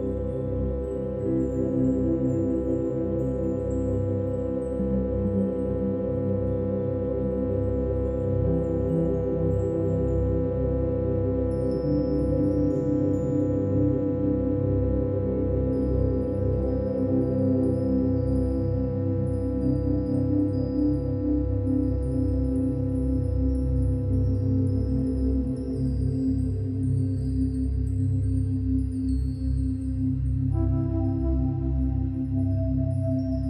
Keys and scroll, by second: 4.1 space, 30.9 ctrl+-, 31.0 ctrl+=, 31.3 ctrl+-, 31.6 ctrl+=, 32.6 ctrl+-.